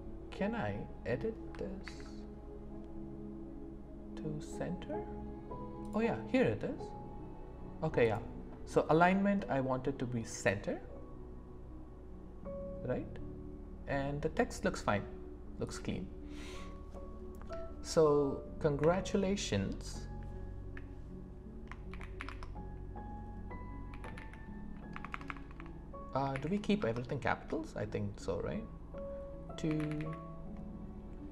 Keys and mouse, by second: 1.8 ctrl+a, 8.0-10.5 drag, 15.6 click, 18.8 Return, 21.9 shift+t, 22.2 o, 22.2 space, 23.9-26.8 typing, 29.7 shift+t.